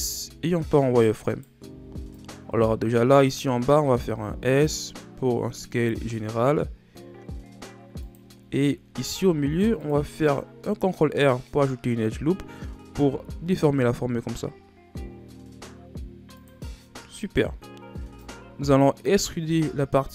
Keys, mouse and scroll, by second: 1.2 right click, 1.6 b, 3.8 s, 9.0 ctrl+r, 11.7-12.4 scroll up 1, 12.9 s, 17.2 right click, 17.9 b, 19.4 z, 19.9 z.